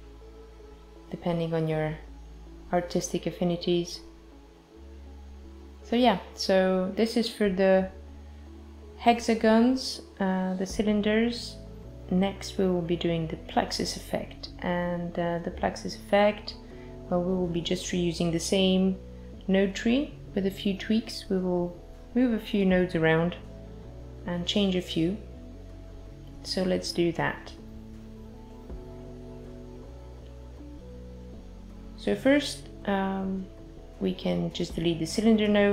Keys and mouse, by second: 0.1 space, 0.9 click, 1.5 space, 8.4 space, 10.0 space, 13.2 click, 17.3 click, 28.3 click.